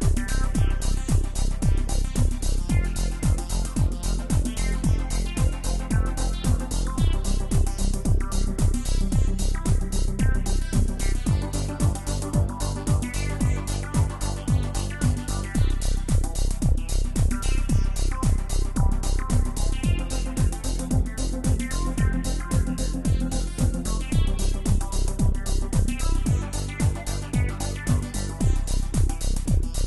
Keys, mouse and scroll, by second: 4.0 click, 4.9 click, 5.8-8.3 middle drag, 8.3 click, 10.0 click, 12.7-13.6 drag, 14.9-17.9 drag, 18.6 click, 21.8-25.6 drag, 25.6-26.4 middle drag, 26.4 space.